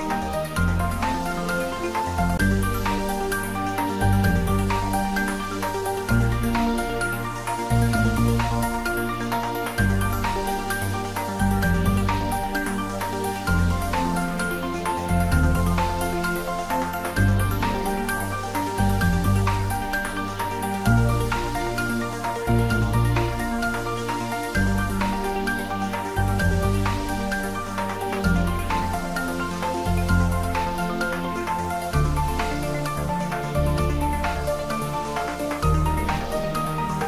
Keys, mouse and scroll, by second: 3.7-6.2 drag, 7.4-9.5 scroll up 1, 10.2-10.6 scroll up 1, 10.6 click, 11.6-12.2 scroll down 1, 13.5 middle click, 14.3-14.8 scroll up 1, 14.8-16.0 scroll down 1, 16.0 click, 22.7 click, 29.5-34.6 drag, 34.6-37.0 drag.